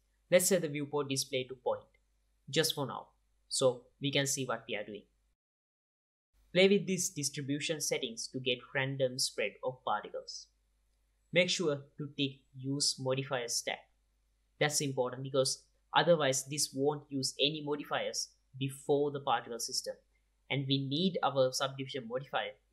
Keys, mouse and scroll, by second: 3.7-4.9 middle drag, 4.9-6.0 drag, 7.6 click, 8.2-9.0 middle drag, 8.7-11.3 drag, 13.7-22.7 drag.